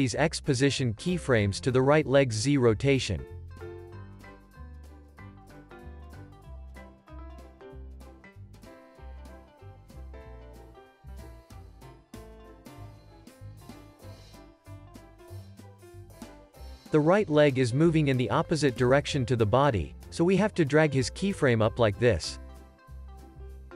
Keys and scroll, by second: 1.7 super+c, 8.4 alt+z, 9.7 x, 10.6 c, 11.7 super+v.